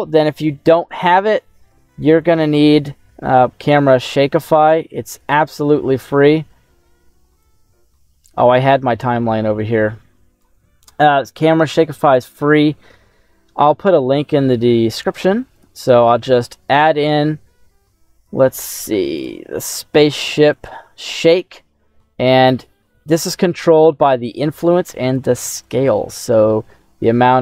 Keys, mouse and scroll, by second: 0.0 click, 2.1 click, 3.8-5.3 drag, 5.5-6.9 scroll down 1, 7.3-10.3 drag, 10.9-11.6 scroll down 2, 12.0 click, 12.6-14.0 scroll down 2, 14.0-15.0 scroll down 1, 15.4 click, 19.1-21.9 drag, 21.9-23.4 scroll down 3, 23.4-25.1 drag, 25.5-27.4 drag.